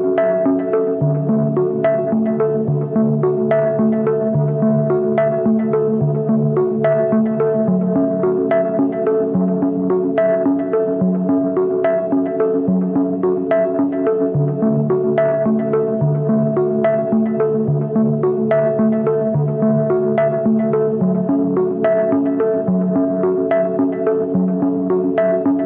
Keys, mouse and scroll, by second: 9.3 alt+BackSpace, 10.3 ctrl+d, 11.8 ctrl+d.